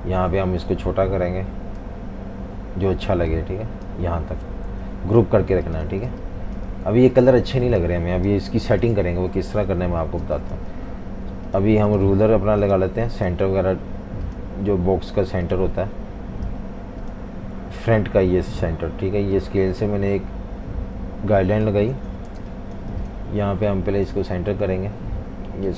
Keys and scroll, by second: 4.7 super+g, 5.9-8.3 typing, 10.1 v, 10.2 space, 21.9 super+2, 22.3 typing.